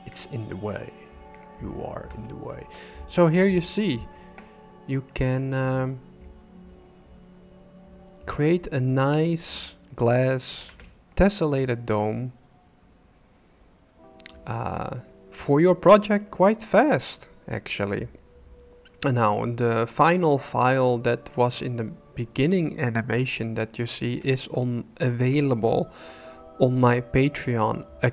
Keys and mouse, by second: 1.4 click, 3.3 middle click, 10.6 alt+a, 11.1 click, 11.7 click, 11.9 middle click, 14.8 middle click.